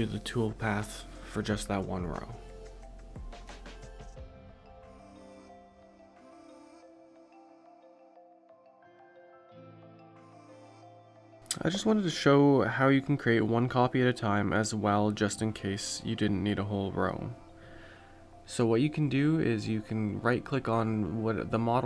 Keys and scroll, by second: 3.0 1.